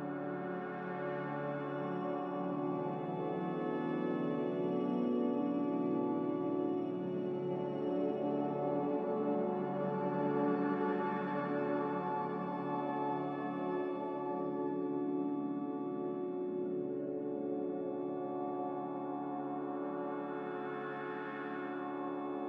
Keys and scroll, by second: 3.8 a, 6.0 ctrl+c, 6.8 ctrl+z, 10.3 ctrl+z, 15.0 ctrl+v.